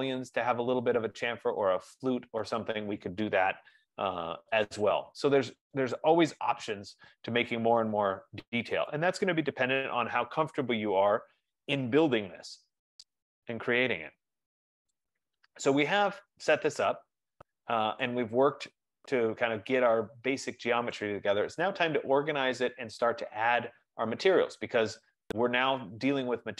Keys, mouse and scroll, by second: 7.8-8.6 scroll, 8.6 scroll, 10.1 right click, 12.8-13.3 scroll, 13.3-13.7 scroll, 13.9 middle click, 15.0 right click, 19.4 right click, 21.0 right click, 24.8-25.7 scroll, 25.7-26.0 scroll.